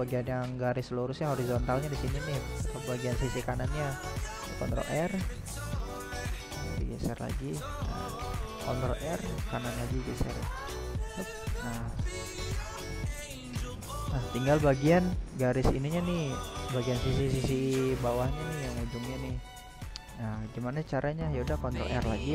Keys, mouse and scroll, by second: 0.5 ctrl+r, 4.4 ctrl+r, 7.5-9.7 middle drag, 9.7 scroll up 1, 10.0-18.1 middle drag, 18.1 ctrl+r.